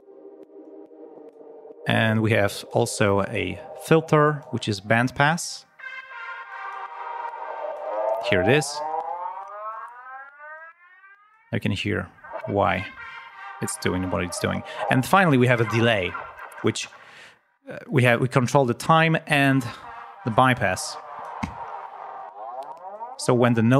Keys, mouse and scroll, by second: 0.6 click, 1.8-2.8 drag, 2.9 scroll down 1, 4.3 click, 6.4 click, 7.7 click, 10.5 click, 18.1 click, 20.4 click, 22.8 click.